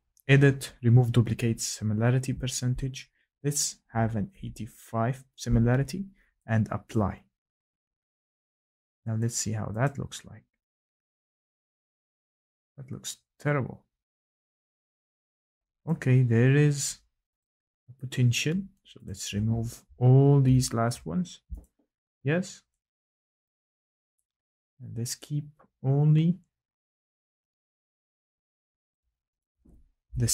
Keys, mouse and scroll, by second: 3.8-4.3 typing, 6.9 click, 9.3 click, 9.8 click, 15.8 click, 17.4 click, 17.7 click, 21.7 ctrl+shift+Delete, 25.0 click, 26.4 click, 27.0 click, 27.5 click, 28.9 click.